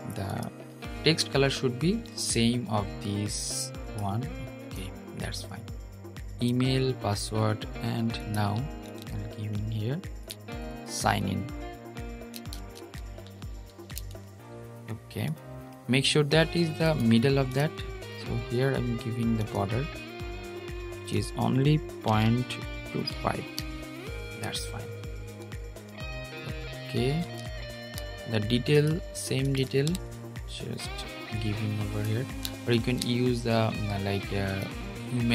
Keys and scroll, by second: 32.4 super+z.